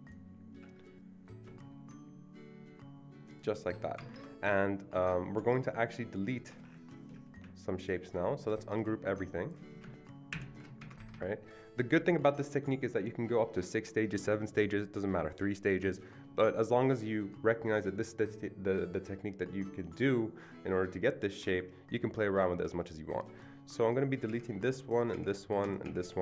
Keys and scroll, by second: 4.0 Escape, 4.1 Escape, 10.3 ctrl+shift+g, 10.8 ctrl+shift+g, 10.8 Escape, 11.0 Escape, 24.3 Delete, 25.1 Delete, 25.9 Delete.